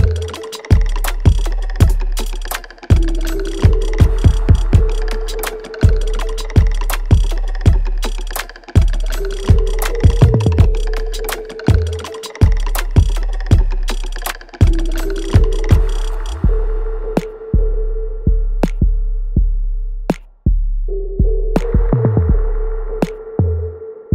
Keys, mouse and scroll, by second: 3.1 ctrl+z, 4.8 alt+click, 5.4 alt+middle click, 6.5 shift+click, 7.9 click, 9.3 alt+right click, 9.7-19.7 alt+drag, 23.0 shift+click, 23.8 alt+right click.